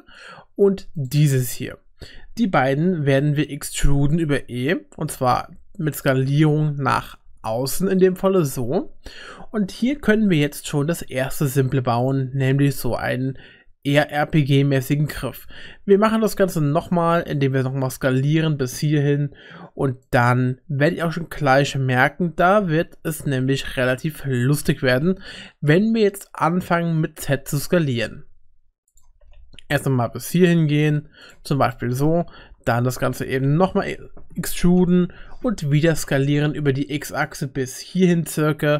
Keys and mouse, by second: 1.6 middle click, 2.4 click, 4.1 e, 6.9 s, 12.7 shift+middle click, 15.1 e, 16.9 s, 20.8 s, 29.1 g, 31.7 middle click, 32.7 middle click, 33.6 e.